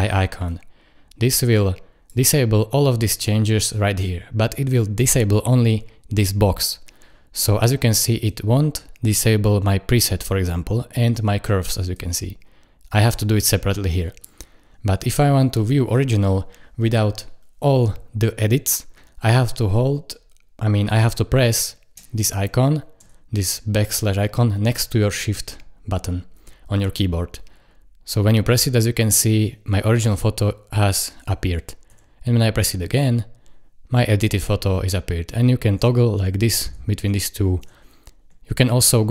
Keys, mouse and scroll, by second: 12.0 click, 23.0 \, 31.9 \, 35.7 \.